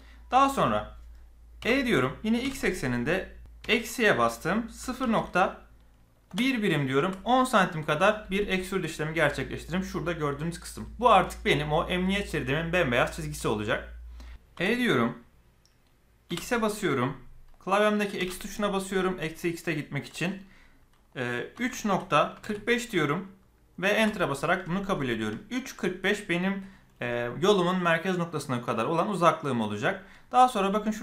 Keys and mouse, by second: 1.6 e, 14.5 e, 25.0 shift+middle click.